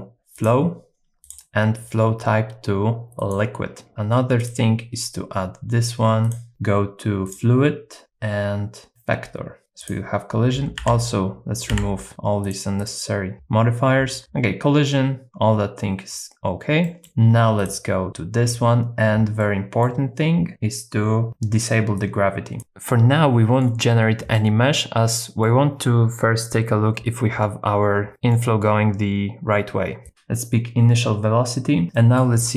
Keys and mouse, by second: 1.2-3.3 drag, 6.3 click, 8.0 click, 9.8 click, 10.8 x, 11.7 x, 12.8 click, 16.8 middle click, 19.5 middle click, 22.0 click, 22.9 middle click, 24.3-25.5 middle drag, 28.1 middle click, 31.9 middle click.